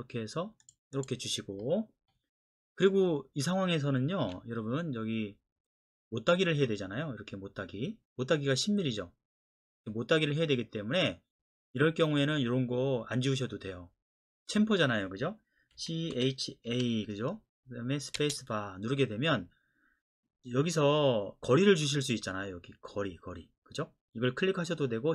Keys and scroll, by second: 4.2 Escape, 15.8-16.7 typing, 18.2 space.